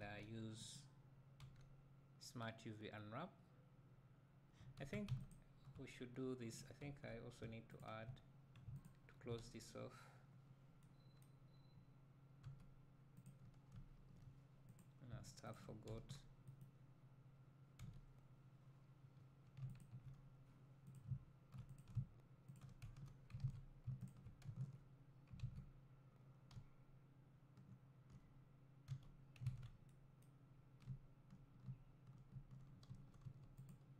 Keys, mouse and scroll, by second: 0.7 right click, 5.0 Tab, 6.6 click, 7.0 Tab, 7.8 alt+click, 10.6 scroll up 1, 12.5 2, 13.5 click, 13.8 `, 14.9 click, 15.6 shift+click, 16.6 right click, 18.3 f, 19.8 alt+click, 21.1 click, 22.6 shift+click, 23.0 f, 23.5 ctrl+z, 24.1 shift+click, 24.8 f, 25.6 ctrl+z, 26.6 z, 29.0 f, 29.6 alt+a, 31.0 `, 33.7 3, 33.7 click.